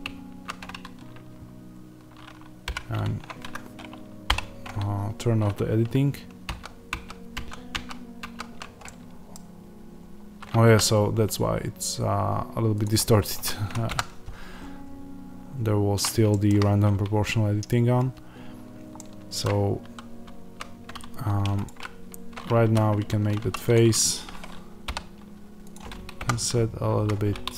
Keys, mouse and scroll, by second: 0.4 z, 3.4 Escape, 4.2 o, 6.4 ctrl+z, 9.3 scroll down 1, 10.6 s, 12.7 click, 12.9 middle click, 13.8 KP_1, 14.5-15.4 scroll up 1, 15.4 scroll down 1, 16.2 shift+middle click, 20.5 z, 21.5 alt+click, 22.5 f, 23.3 3, 23.6 click, 24.8 i, 25.6 click, 26.1 KP_1, 26.9 z, 27.3 scroll up 1.